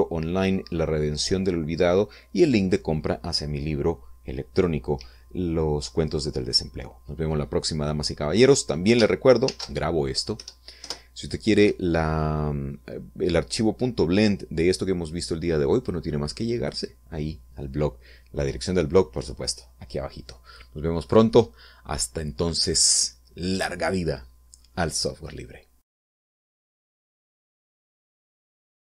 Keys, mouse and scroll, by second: 10.8 ctrl+shift+s, 12.2 Return.